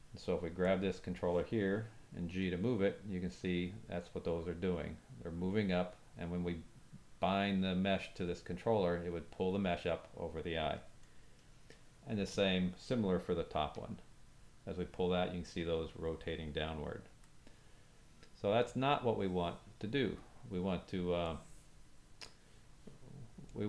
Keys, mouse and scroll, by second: 2.3 g, 12.3 click, 13.6 g, 18.6-23.6 drag.